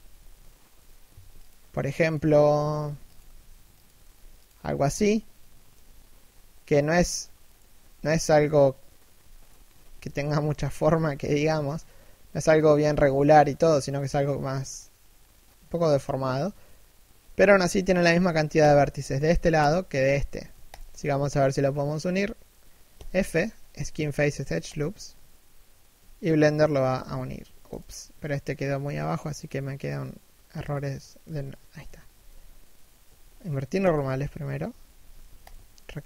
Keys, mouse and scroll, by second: 0.4 l, 0.8 shift+d, 2.3 g, 4.3 a, 6.6 alt+right click, 9.1 alt+shift+right click, 9.8 alt+shift+middle click, 10.3-10.7 scroll up 1, 10.7 alt+shift+middle click, 11.0-11.4 alt+shift+scroll down 1, 11.4-12.2 scroll up 1, 12.6 3, 13.0 1, 13.7-14.0 scroll down 1, 14.0 shift+middle click, 18.2 alt+right click, 20.4 alt+shift+right click, 22.6 f, 27.4 right click, 28.5 l, 30.9 a, 32.7 ctrl+n, 33.7 z, 34.7 a, 35.1 alt+right click.